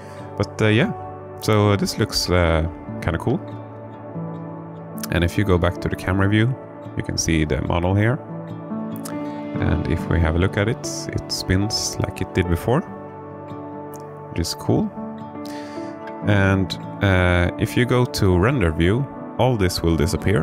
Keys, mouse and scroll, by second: 2.1 KP_0, 10.7-15.9 drag.